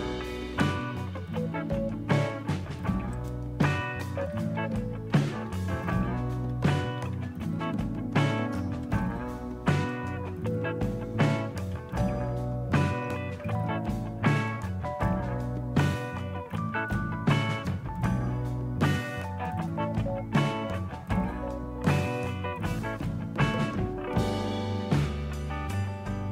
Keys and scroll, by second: 4.6-8.5 typing, 8.8 Return, 11.3-12.8 typing, 13.0 Tab, 13.4 Tab, 18.5 BackSpace, 19.0 BackSpace, 19.0-19.5 BackSpace, 24.8 typing.